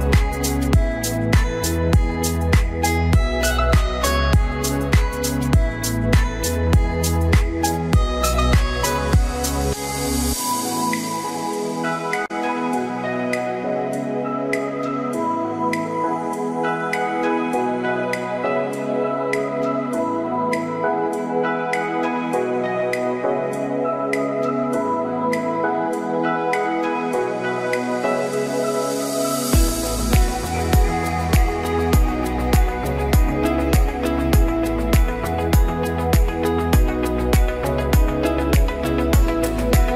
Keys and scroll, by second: 4.0 ctrl+t, 17.9 ctrl+t, 30.6 ctrl+t, 39.7 ctrl+t.